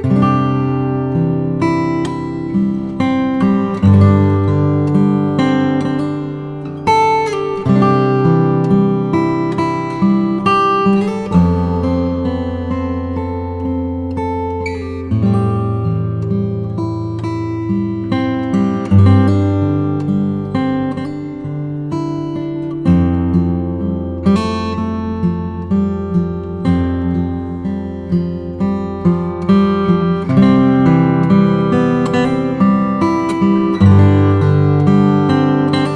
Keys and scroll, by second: 2.8-3.7 typing, 5.0 ], 15.6 0, 19.8 5, 21.0 [, 23.2 0, 23.6 [, 25.5 5, 26.0 ], 28.9 [, 31.9 [, 35.4 ].